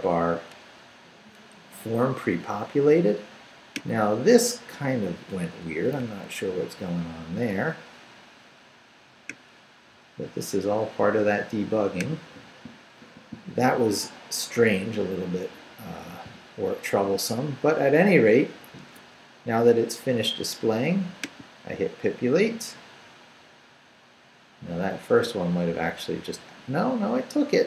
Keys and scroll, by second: 6.0 super+r.